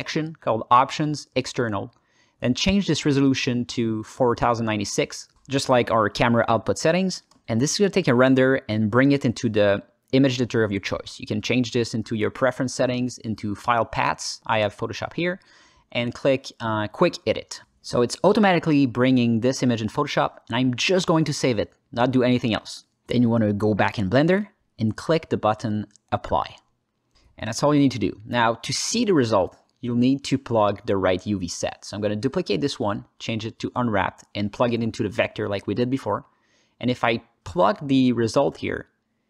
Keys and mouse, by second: 0.2 click, 0.8 alt+middle click, 2.1-4.0 drag, 10.9-11.6 drag, 19.1 click, 26.4 click, 28.8 alt+click, 29.2 ctrl+click, 29.7 ctrl+space, 31.4 click, 31.7 shift+d, 32.1 click, 32.6 click, 34.1-35.0 drag, 35.7-36.2 drag, 36.6 ctrl+space.